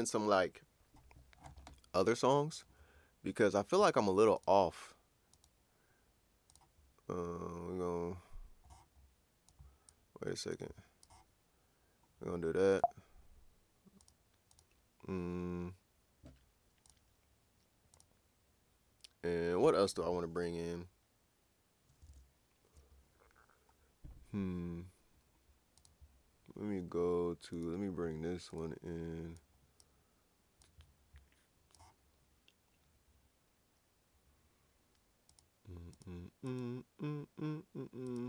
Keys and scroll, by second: 22.1 super+Tab.